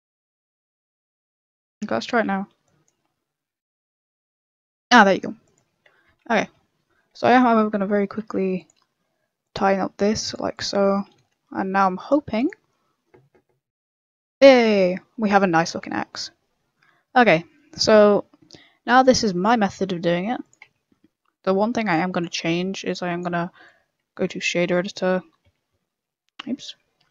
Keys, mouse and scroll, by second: 0.0 ctrl+r, 0.0 a, 1.6 a, 2.1 KP_0, 2.6 click, 6.4 KP_0, 7.0 scroll up 1, 7.0 middle click, 8.1 ctrl+r, 9.6 a, 9.9 ctrl+r, 10.7 a, 11.1 KP_0, 11.7 click, 21.5 click, 24.9 click, 24.9 m.